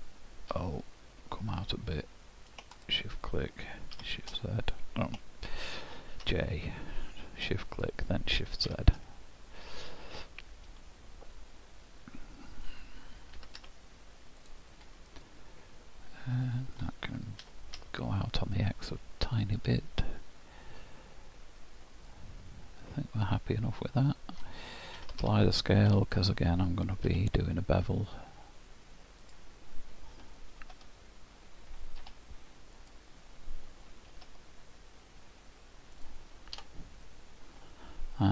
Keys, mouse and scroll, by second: 8.7 shift+z, 9.6 middle click, 13.5 s, 15.1 middle click, 17.4 g, 22.1 middle click, 25.0 ctrl+a, 25.9 Tab, 27.1 2, 29.2 click, 30.6 ctrl+b, 32.0 Escape, 32.8 click, 34.1 ctrl+b, 36.6 Tab, 37.5 scroll down 4.